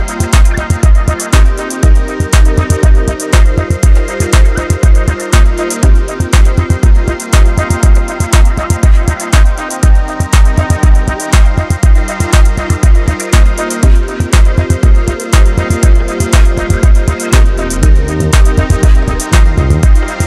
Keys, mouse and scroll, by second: 1.0 click, 1.7 KP_1, 2.5 click, 4.3 click, 5.3 click, 7.3-8.9 middle drag, 8.9 click, 9.9 click, 12.2 click, 13.1 KP_1, 13.5-13.9 scroll down 1, 13.9 Tab, 14.6 alt+z, 14.8-15.1 scroll down 1, 15.1-16.8 middle drag, 16.8 KP_1, 17.1-17.6 scroll up 3, 17.6-18.0 shift+middle drag, 18.0 scroll up 2, 18.3 Tab, 19.9 click.